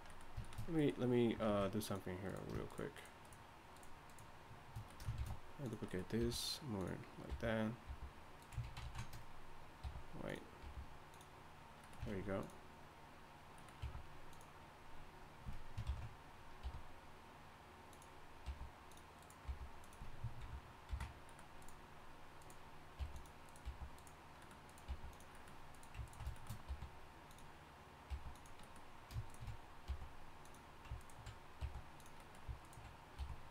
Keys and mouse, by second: 1.5 ctrl+Tab, 4.1 shift+right click, 5.2 shift+d, 6.2 r, 7.3 f, 7.8 g, 8.6 ctrl+z, 8.8 ctrl+z, 9.8 r, 10.6 g, 12.1 ctrl+Tab, 13.8 e, 15.8 ctrl+l, 16.6 r, 18.4 g, 19.2 click, 19.4 g, 20.4 ctrl+l, 20.9 ctrl+n, 23.0 g, 23.7 g, 24.9 g, 26.7 r, 28.1 g, 29.2-30.4 drag, 29.9 g, 31.0-32.0 drag, 31.6 g, 33.2 r.